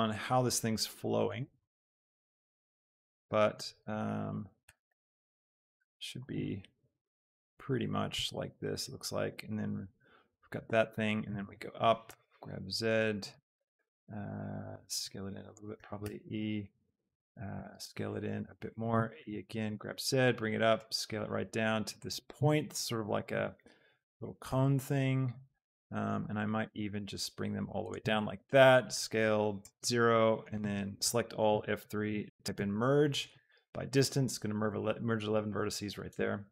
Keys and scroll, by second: 2.1 Escape, 2.8 z, 3.9 s, 5.0 Escape, 5.4 s, 8.3 s, 11.3 e, 11.6 Escape, 12.0 g, 12.4 z, 14.9 s, 15.7 e, 16.0 Escape, 17.5 s, 19.0 e, 19.3 Escape, 19.7 z, 20.8 s, 23.4 z, 24.5 s, 28.9 shift+s, 29.6 Return, 30.7 a, 31.4 F3, 32.2 m, 32.6 r, 33.3 Return.